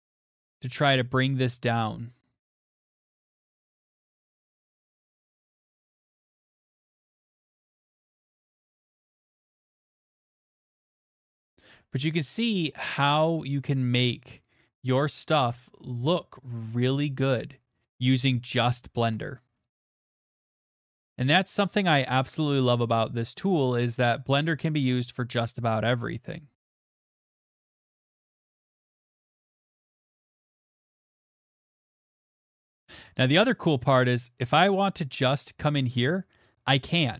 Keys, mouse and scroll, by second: 1.0 click, 1.7 click, 2.3 click, 2.5 click, 3.4 middle click, 3.6 click, 3.8 click, 4.1 middle click, 4.4 click, 4.6 click, 4.9 click, 6.1 click, 6.5 click, 6.8 click, 7.2 middle click, 7.5 click, 7.6 click, 7.8 click, 8.1 middle click, 8.4 click, 8.6 click, 8.9 click, 9.1 middle click, 9.2 middle click, 9.2 middle click, 9.7 middle click, 10.6 click, 10.7 click, 10.8 click, 11.5 middle click, 11.7 middle click, 11.7 middle click, 11.7 middle click, 12.8 middle click, 13.4 middle click, 15.4 click, 15.9 click, 16.7 click, 17.0 click, 17.8 click, 18.0 click, 19.0 middle click, 19.5 click, 19.7 click, 20.1 click, 20.2 click, 20.7 middle click, 20.9 click, 21.0 click, 21.8 click, 22.0 click, 22.7 middle click, 23.0 click, 23.3 click, 23.9 middle click, 24.3 click, 24.9 middle click, 25.7 click, 25.9 click, 26.2 click, 26.4 right click, 27.5 click, 27.9 middle click, 28.3 click, 28.7 middle click, 28.9 click, 31.5 click, 31.9 click, 32.5 click, 35.0 click, 35.3 scroll, 36.0 scroll, 36.8 scroll.